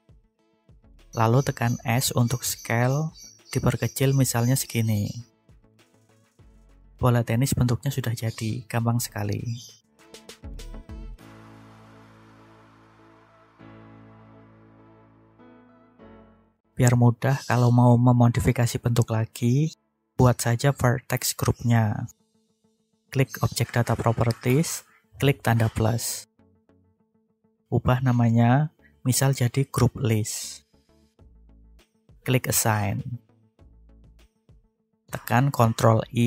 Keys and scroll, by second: 0.6 s, 3.6 9, 3.8 3, 4.8 Return, 28.9 shift+l, 29.1 i, 29.4 s, 30.8 Return, 34.5 ctrl+i.